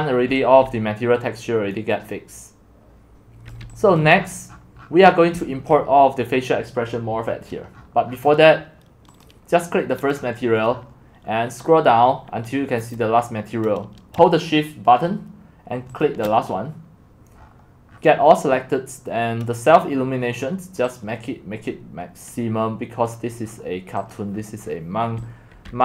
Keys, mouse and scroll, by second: 0.2 click, 0.3-1.7 typing, 2.8-3.4 x, 3.5 click, 3.6 x, 4.0 click, 4.2 scroll up 6, 4.4-5.3 scroll down 28, 5.7-7.7 drag, 7.7-8.1 scroll up 15, 8.1-9.2 scroll down 15, 9.2 click, 10.1-13.8 scroll down 18, 13.8-14.7 scroll down 1, 14.7-15.3 scroll down 1, 15.3-16.0 scroll down 1, 16.0-17.4 shift+drag, 17.4-19.9 scroll down 25, 19.9-20.7 scroll down 3, 20.7-22.3 scroll down 1, 22.3-23.0 scroll down 1, 23.0 click, 23.4-24.5 scroll down 11, 24.1 click, 24.5 scroll, 24.5 scroll, 24.7 scroll, 24.7 scroll, 24.8 scroll, 25.2-25.8 typing.